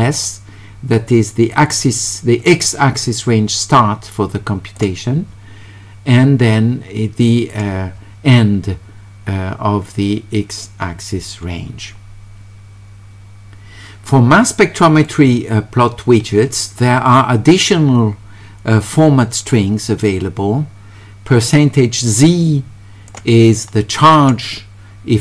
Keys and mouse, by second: 1.5-4.8 drag, 6.6 click, 15.0-16.2 drag, 21.6-23.1 drag, 24.0 click.